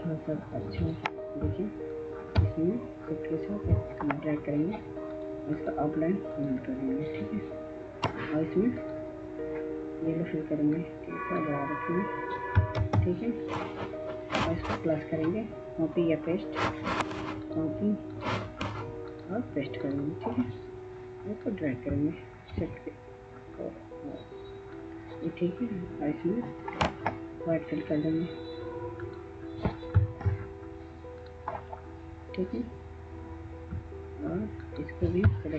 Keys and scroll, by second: 12.5 ctrl+space.